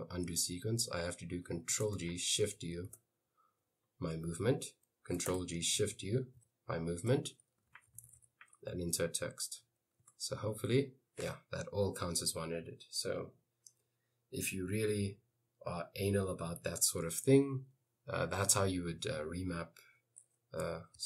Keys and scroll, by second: 1.9 ctrl+g, 2.4 shift+u, 2.9 Left, 5.4 ctrl+g, 5.8 shift+u, 6.4 Right, 7.3-8.5 typing, 10.2 Escape, 10.7 u.